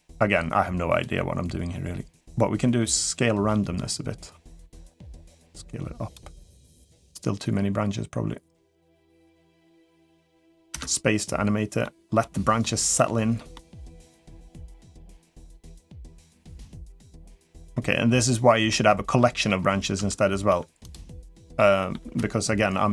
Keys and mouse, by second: 2.9-4.5 drag, 4.9-5.9 drag, 7.0-9.2 drag, 9.4 middle click, 10.5 space, 11.6 middle click, 12.4 middle click, 13.3-14.6 middle drag, 15.7-16.4 middle drag, 17.2-18.5 middle drag, 19.0 middle click, 19.8 Tab, 20.3 Tab, 20.6 click, 21.4-21.7 middle drag.